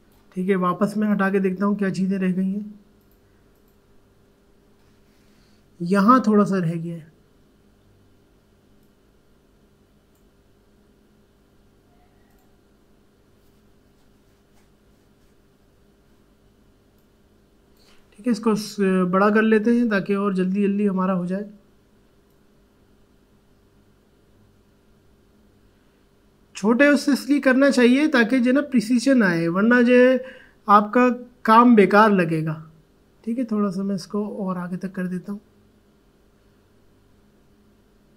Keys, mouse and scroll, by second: 8.8-12.3 drag, 16.9 click, 17.0-18.5 drag, 18.5-19.4 typing, 22.3-38.1 drag.